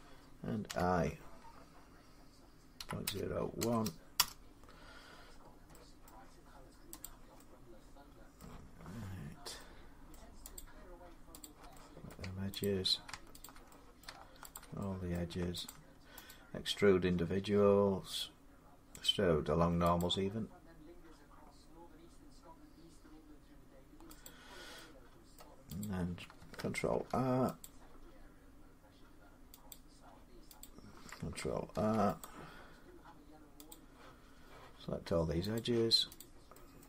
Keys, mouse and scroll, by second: 0.5 i, 2.6-3.4 typing, 4.0 Return, 5.2 scroll, 5.8 middle click, 6.3 scroll, 6.9 click, 8.2 middle click, 9.3 middle click, 9.3 scroll down 4, 9.9 middle click, 10.3 click, 11.2 shift+click, 11.9 middle click, 12.4 shift+click, 13.2 shift+click, 13.8 middle click, 14.3 shift+click, 14.9 middle click, 15.5 shift+click, 16.0 right click, 19.8 click, 24.0 click, 25.1 middle click, 25.6 click, 26.7 ctrl+r, 27.4 click, 29.5 click, 30.4 click, 31.5 ctrl+r, 32.0 click, 33.5 click, 35.3 click, 36.3 click, 36.6 middle click.